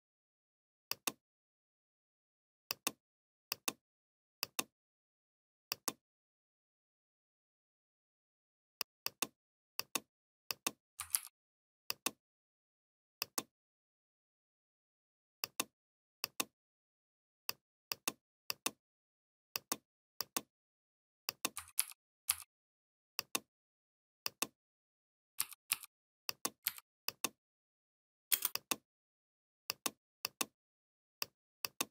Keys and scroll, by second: 10.9 ctrl+g, 21.6 ctrl+g, 22.1 g, 26.4 v, 28.1 space.